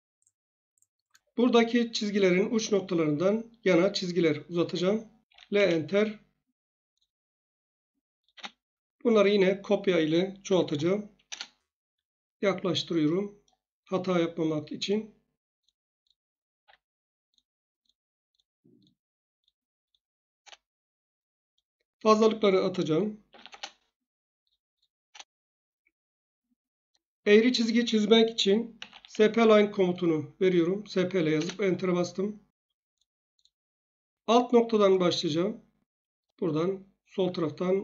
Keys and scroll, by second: 5.3 1, 5.5 Return, 8.3 space, 10.2-11.2 typing, 11.3 Return, 16.6 F8, 20.3 Return, 23.0-23.9 typing, 25.0 Return, 28.7-29.4 typing, 31.3 Return.